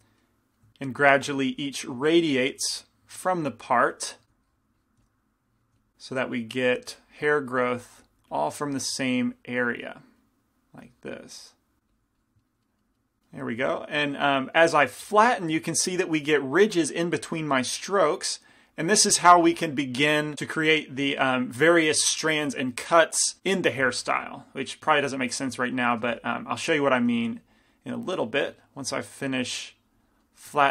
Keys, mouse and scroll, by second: 0.0-2.0 middle drag, 0.0 right click, 1.6 f, 2.0 f, 2.7-13.1 drag, 3.4-7.7 typing, 10.0-13.6 middle drag, 26.2 f, 26.7-30.7 drag, 27.3 f, 29.1-30.5 middle drag, 29.1 f.